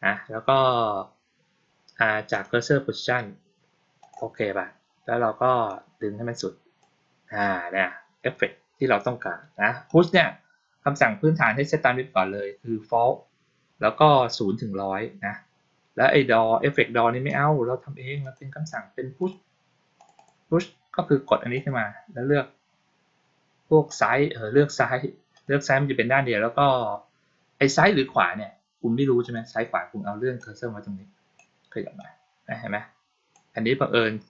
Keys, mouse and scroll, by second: 2.2 click, 3.9 click, 5.5-6.7 drag, 9.7 click, 17.1 click, 18.1 click, 19.1 click, 19.8 click, 20.0 click, 21.4 click, 23.8 click, 25.2 click, 29.1 click, 30.2-31.2 drag, 31.8 click.